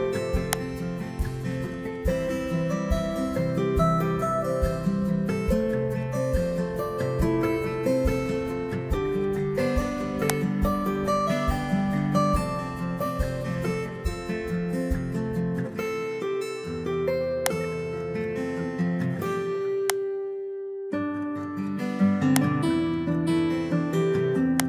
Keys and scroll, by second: 15.7 BackSpace, 18.9 BackSpace.